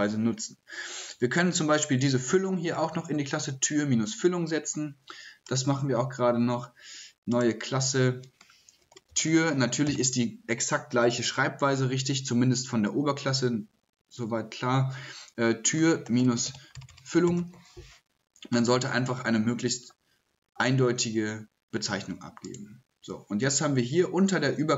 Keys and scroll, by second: 8.6-9.9 typing, 15.5-17.9 typing.